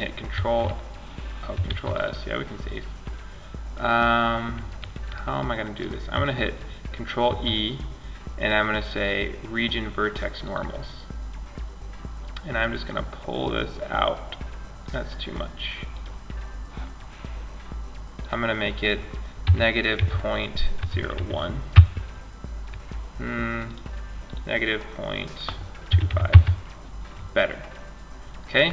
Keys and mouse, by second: 0.8 ctrl+s, 6.4 alt+e, 15.2-17.0 drag, 17.4-19.9 drag, 22.8-24.6 drag, 26.5-28.7 middle drag.